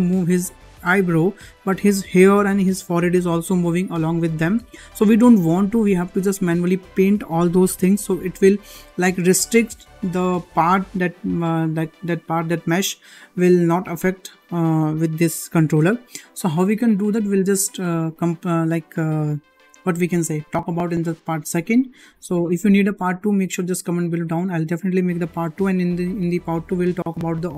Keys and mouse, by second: 0.4 g.